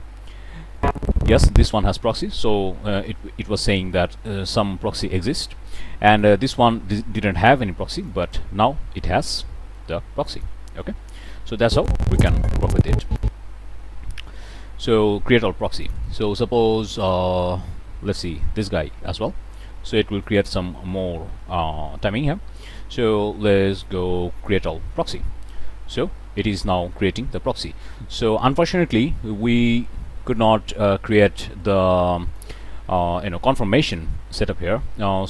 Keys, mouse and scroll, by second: 0.7-1.8 drag, 6.0 click, 8.0-10.6 drag, 10.8 ctrl+z, 11.6-13.3 drag, 15.8 click, 17.0 click, 17.4-18.4 drag, 19.2-19.7 scroll down 1, 20.0 middle click, 20.1 click, 20.4 click, 20.6 scroll up 1, 20.9-21.2 middle drag, 22.0-22.4 drag, 24.4 click, 30.3 click, 31.9 click.